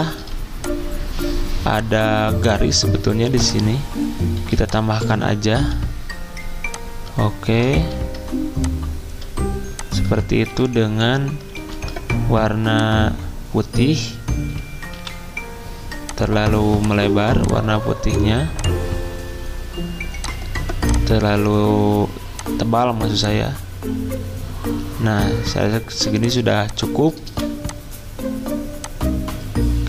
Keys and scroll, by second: 0.0-0.2 typing, 4.4 z, 5.5 p, 7.7 ctrl+z, 10.5 d, 11.6 x, 15.0 v, 25.9 z, 27.2 v.